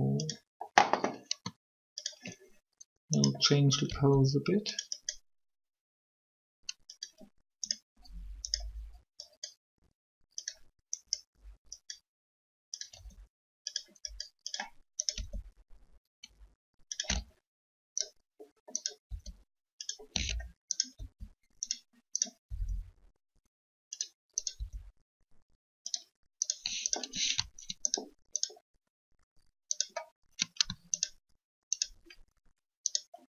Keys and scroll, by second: 3.8 r, 12.9 r, 15.1 r, 19.0 r, 20.9 r, 22.7 r, 24.5 r.